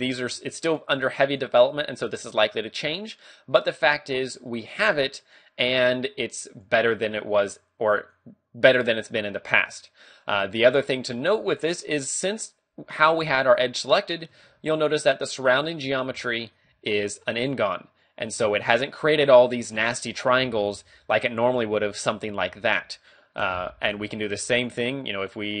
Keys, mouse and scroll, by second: 0.7 click, 1.3 click, 2.3 click, 3.9 scroll down 1, 5.2 click, 6.5 click, 8.0 click, 10.2 click, 11.5 a, 14.5 ctrl+Tab, 15.8 right click, 16.1 g, 16.6 right click, 16.7 a, 18.4 right click, 19.1 a, 20.3 right click, 20.6 ctrl+t, 21.0 a, 21.2 middle click, 22.6 ctrl+z, 22.8 ctrl+z, 23.2-23.6 scroll down 2, 23.6 a, 24.1 ctrl+Tab, 25.1 right click.